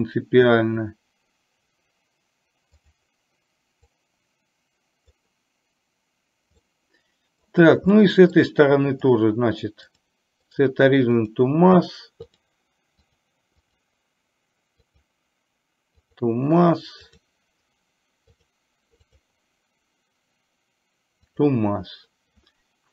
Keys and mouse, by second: 2.9 click, 3.9 click, 4.2-5.3 drag, 6.8 middle click, 8.0 middle click, 9.2 click, 9.9-11.5 drag, 12.3-12.7 drag, 13.0 click, 13.8-16.4 drag, 17.2 click, 18.4-21.7 drag.